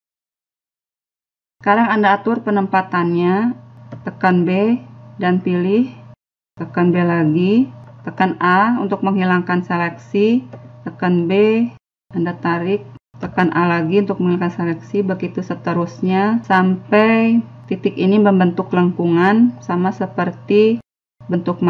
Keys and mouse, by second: 0.3 right click, 0.5-2.3 drag, 1.1-2.9 middle drag, 2.9 a, 4.3 b, 5.4 click, 6.4 middle click, 7.0 b, 7.9 a, 9.2 click, 10.3 a, 10.6 b, 11.2 click, 12.6 a, 13.1 b, 13.9-15.7 drag, 15.7 middle click, 16.2 a, 16.6 b, 16.9 click, 17.5 middle click, 18.2 a, 18.4 b, 18.8 click, 19.4 middle click, 20.1 a, 20.3 b, 20.7 click, 21.4 middle click.